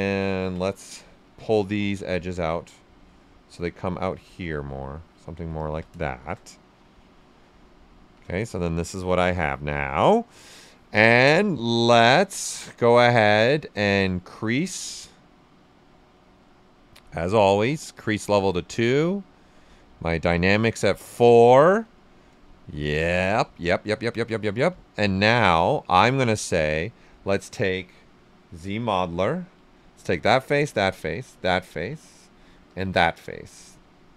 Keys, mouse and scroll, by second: 1.2 w, 2.3-5.2 drag, 5.2 q, 5.5 ctrl+click, 6.1 shift+f, 6.5-7.9 right drag, 7.9 shift+f, 8.4-11.3 right drag, 11.3-18.7 drag, 19.6-21.8 drag, 21.8 right click, 22.6 shift+f, 23.4 right click, 24.6 click, 25.2-28.3 alt+right drag, 28.1-29.4 typing, 29.8 alt+click, 30.7 right click, 31.2 alt+click, 31.6 alt+right click, 32.6 alt+click, 33.0 right click.